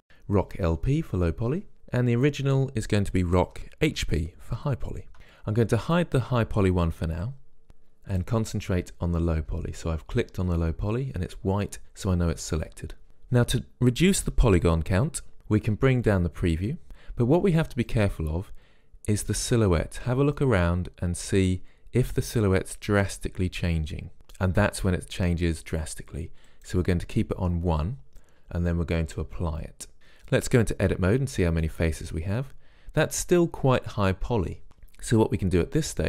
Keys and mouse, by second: 1.8 middle click, 2.4-4.3 drag, 3.8 r, 4.2 o, 4.8 c, 7.7-10.2 drag, 10.2 middle click, 16.7-17.7 drag, 17.7 middle click, 18.2-20.1 drag, 20.6-24.2 middle drag, 24.2-25.9 drag, 26.8-28.8 drag, 30.0-31.2 drag, 31.2 Tab, 31.9 middle click.